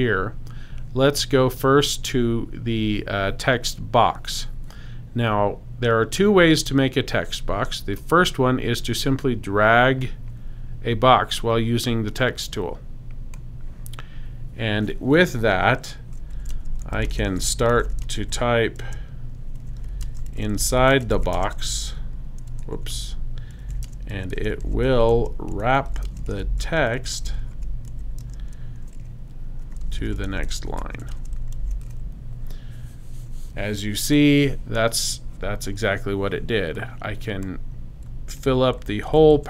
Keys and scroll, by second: 16.1-28.4 typing, 29.4-32.3 typing, 38.4 super+c, 38.8 super+v.